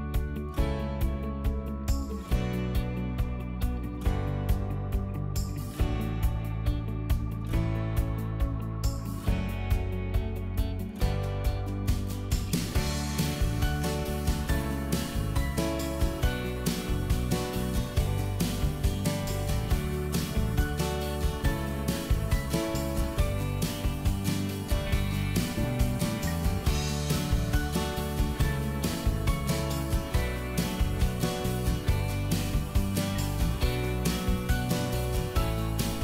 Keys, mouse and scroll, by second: 0.5 a, 1.7 l, 2.1 click, 4.0 middle click, 4.5 a, 5.1 click, 9.0 ctrl+z, 9.8 e, 9.9 click, 10.7 l, 11.2 click, 13.5 q, 14.8 click, 15.5 ctrl+click, 17.1 KP_7, 17.9 space, 18.1 middle click, 18.5 scroll down 1, 18.7 shift+middle click, 19.2 click, 19.7 middle click, 20.3 shift+middle click, 21.8 scroll up 1, 22.2 middle click, 23.2 click, 24.1 scroll down 1, 25.7 scroll up 1, 25.9 click, 26.9 middle click, 28.0 click, 29.1 Delete, 29.5-31.0 middle drag, 31.4-32.8 drag, 32.8 middle click, 33.6 middle click, 34.1 m, 34.5 ctrl+click.